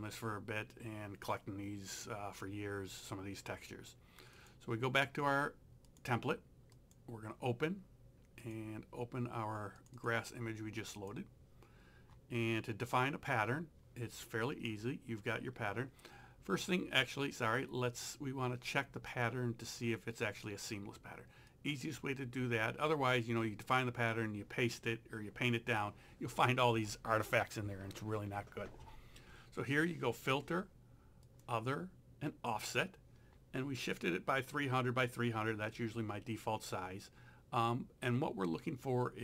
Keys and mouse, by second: 4.4 click, 8.4 click, 21.5 click, 31.3 click.